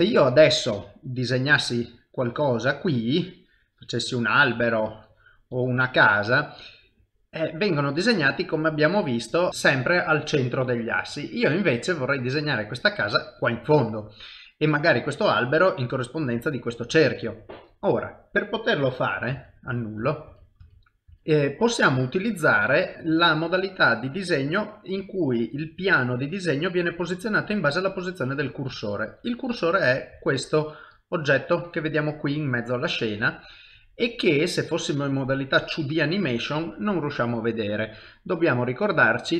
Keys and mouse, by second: 1.8-6.5 click, 6.5 middle click, 11.8 middle click, 18.9 middle click, 19.3 ctrl+z, 19.7 ctrl+z, 21.2 ctrl+z, 21.2 middle click, 21.9 shift+middle click, 22.4 middle click, 31.0 ctrl+middle click, 33.2 shift+middle click, 34.7 middle click, 37.7 click.